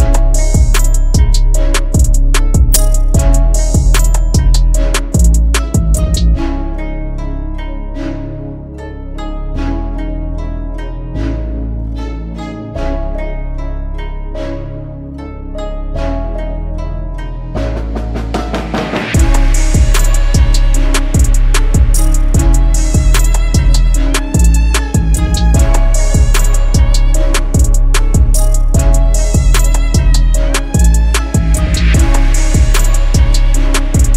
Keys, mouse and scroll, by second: 20.3 right click.